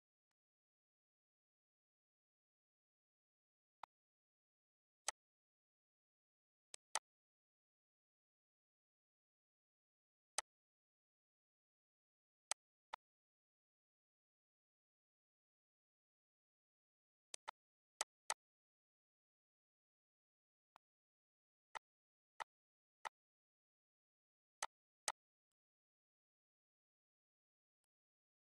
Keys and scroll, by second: 8.1 End, 9.5 Delete, 14.3 shift+Left, 27.2 Delete.